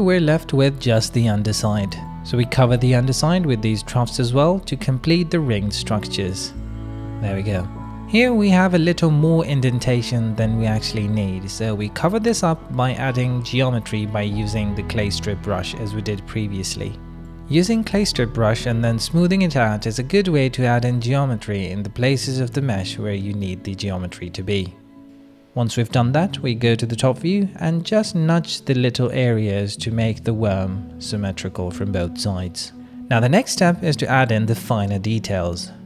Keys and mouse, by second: 0.7 ctrl+KP_7, 1.5 shift+middle click, 1.7 click, 2.2 click, 3.8 shift+middle click, 6.1 middle click, 6.5 middle click, 7.0 middle click, 7.8 middle click, 8.3 shift+middle click, 8.7 click, 9.2 q, 10.9 middle click, 11.1 click, 11.1 middle click, 11.2 click, 11.3 middle click, 11.8 click, 11.9 ctrl+z, 12.3 middle click, 13.4 ctrl+z, 13.7 middle click, 14.4 middle click, 15.8 ctrl+alt+click, 15.9 middle click, 16.1 middle click, 16.9 q, 18.2 click, 18.8 right click, 19.0 click, 19.9 shift+right click, 20.6 ctrl+alt+middle click, 21.2 middle click, 22.1 click, 22.4 shift+click, 22.6 click, 22.6-24.9 middle drag, 25.3 KP_7, 25.4 f, 27.4 middle click, 27.9 middle click, 28.1 middle click, 29.4 click, 30.1 click, 31.9 click, 32.1 click, 33.3 click, 34.4 middle click, 34.4 click, 35.0 ctrl+middle click, 35.4 ctrl+middle click, 35.8 middle click.